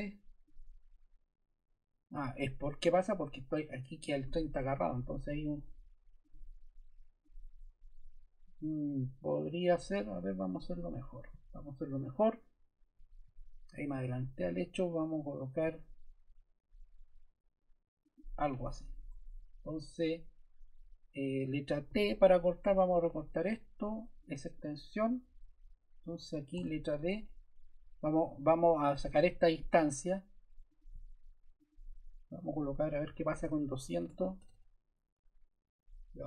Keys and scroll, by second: 4.6 BackSpace, 10.9 BackSpace, 19.0 Escape, 21.8 t, 26.1 Escape, 26.5 d, 32.8-33.8 typing, 34.0 Return.